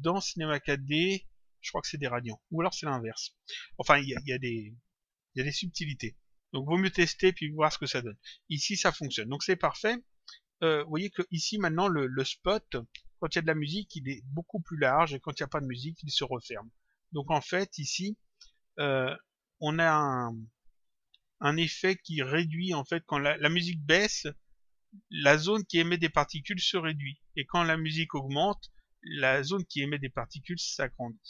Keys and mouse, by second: 2.4 click, 5.1 click, 7.6 click.